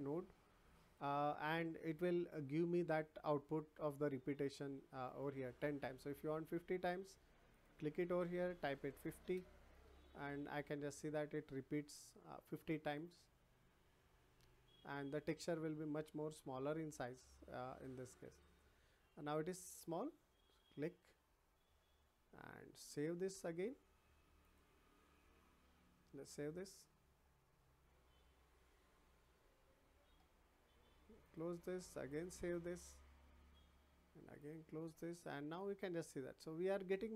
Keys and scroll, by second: 8.7 5, 9.2 Return.